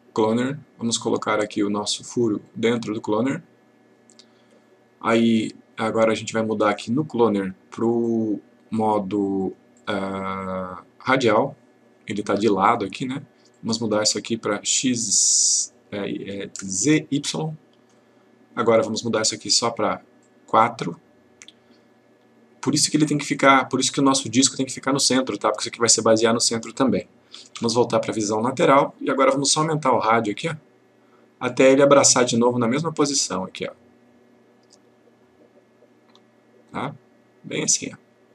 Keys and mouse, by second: 2.4-4.0 click, 6.7 click, 13.5 click, 17.3 click, 20.2 click, 27.5 F3, 30.3-38.3 click.